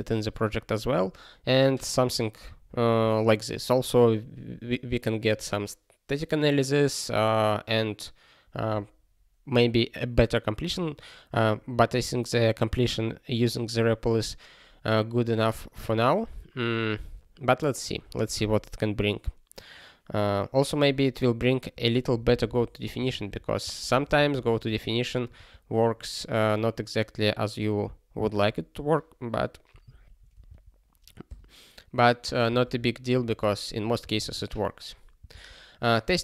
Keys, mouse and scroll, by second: 21.7 ctrl+p, 22.3 alt+b, 22.4 alt+b, 22.9 alt+f, 23.2 alt+f, 23.6 alt+b, 24.0 ctrl+space, 24.1 ctrl+e, 24.7 alt+f, 25.3 ctrl+g, 29.8 ctrl+p, 30.2 ctrl+a, 30.3 ctrl+space, 30.4 ctrl+n, 31.3 ctrl+g, 32.4 ctrl+space, 32.6 ctrl+p, 34.0 ctrl+n, 34.1 ctrl+n, 35.1 ctrl+space, 35.3 ctrl+n, 36.1 ctrl+p.